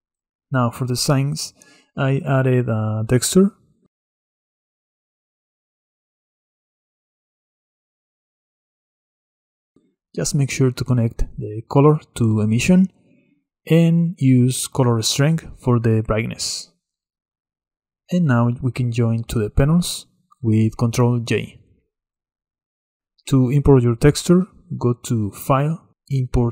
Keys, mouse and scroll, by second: 1.2-1.8 scroll up 1, 1.8-3.9 middle drag, 3.9-5.5 drag, 6.0 click, 6.9-13.4 middle drag, 13.4-18.9 drag, 22.6 ctrl+j.